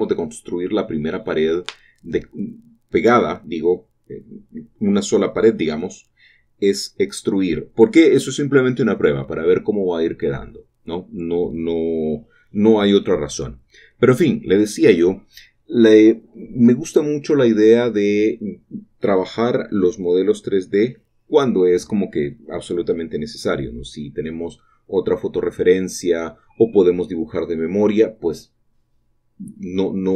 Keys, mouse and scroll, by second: 0.1 typing, 2.1 middle click, 2.3 typing, 2.8-11.6 ctrl+middle drag, 8.8 typing, 11.6-14.6 drag, 14.6 typing, 18.5-25.9 shift+drag, 25.9-30.1 shift+middle drag.